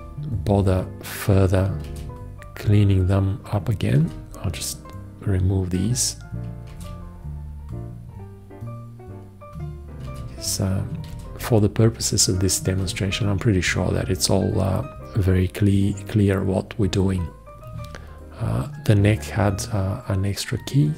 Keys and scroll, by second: 2.1 shift+x, 4.2 shift+x, 7.0 shift+x, 10.3 shift+x, 11.3 shift+x, 13.1 shift+x.